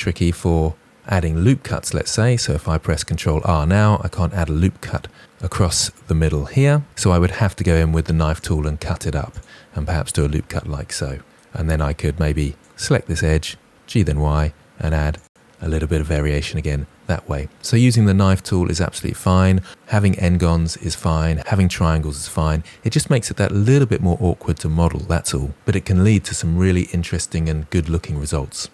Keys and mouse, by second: 3.2 ctrl+r, 7.4 k, 7.7 click, 8.6 click, 11.1 Return, 12.2 2, 12.5 click, 13.1 click, 13.9 g, 14.2 y, 15.2 click.